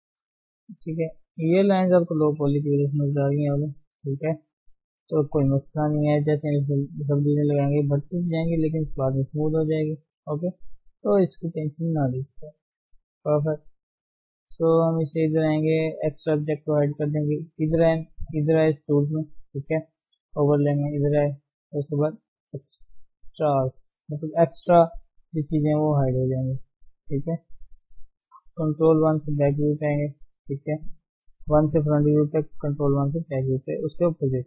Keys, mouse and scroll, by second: 3.5 click, 4.0 d, 4.1 d, 4.3 click, 4.8 right click, 5.6 scroll down 1, 5.7 middle click, 6.3 ctrl+Tab, 6.9 ctrl+1, 7.8 middle click, 8.7 scroll up 1, 8.9-9.9 middle drag, 10.0-13.0 middle drag, 13.0 ctrl+0, 13.4-15.7 middle drag, 15.7-26.0 drag, 26.0 scroll down 1, 26.3 middle click, 26.7 Tab, 26.9 middle click, 27.2-27.8 scroll up 1, 27.8-29.1 scroll up 1, 28.2 ctrl+KP_1, 29.1-30.2 shift+middle drag, 30.2 click, 30.9 g, 31.9 click, 32.1 g, 33.2 click, 33.5 g, 34.2 click.